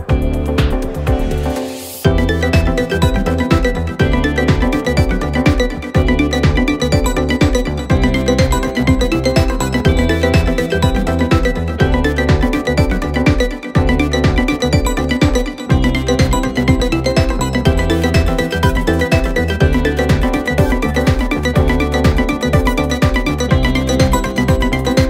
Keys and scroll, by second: 0.0 ., 3.6 F2, 7.6 F1, 10.1 F1, 17.1 Menu, 18.3 F9, 19.4 F1, 19.7 F2.